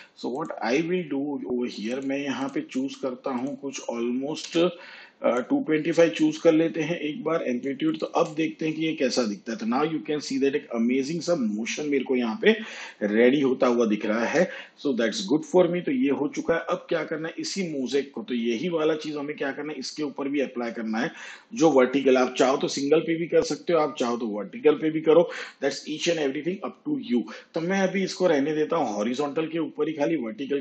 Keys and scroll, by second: 4.4 2, 8.0 space, 14.2 space.